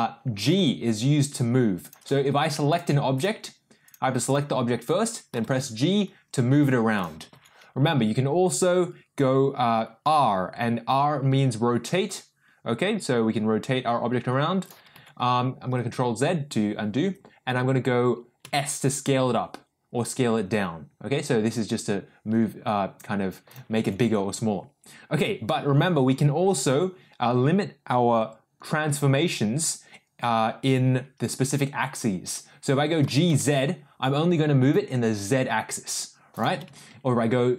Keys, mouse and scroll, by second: 0.5 g, 2.3 ctrl+z, 3.8 click, 4.2 click, 5.3 g, 7.3 ctrl+z, 10.1 r, 14.9 ctrl+z, 18.4 s, 23.7 ctrl+z, 33.0 g, 36.6 ctrl+z.